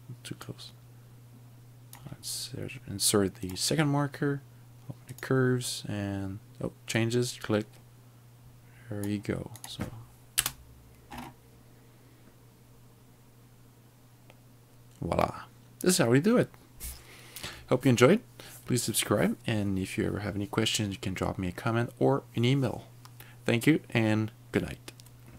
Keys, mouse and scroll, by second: 0.6 click, 3.5 click, 5.1 click, 7.1 click, 9.7 click, 10.4 space, 11.1-12.3 scroll up 4.